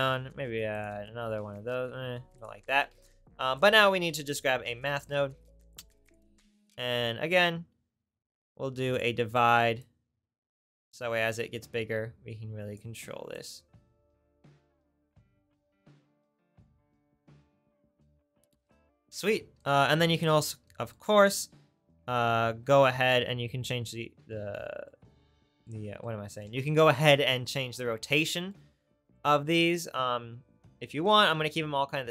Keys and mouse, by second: 3.0 shift+a, 6.1 click, 12.8 click, 17.4 middle click, 21.4-23.0 middle drag, 24.8 middle click.